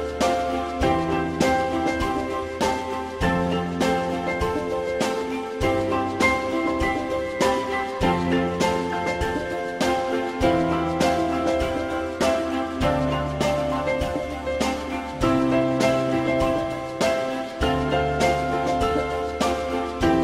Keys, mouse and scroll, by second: 0.4 click, 4.3 shift+click, 5.1 shift+click, 9.8 alt+middle click, 17.9 click, 18.6 w.